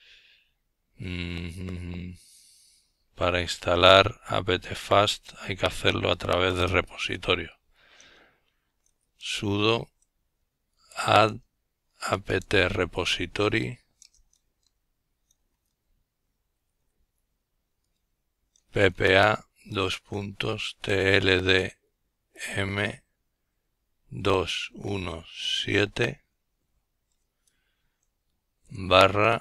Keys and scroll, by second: 5.4-5.8 typing, 7.1-13.4 typing, 15.2-17.9 typing, 19.0 typing, 20.6-21.3 typing, 23.8 typing, 25.2 typing, 26.6-28.1 typing, 29.2-29.4 typing.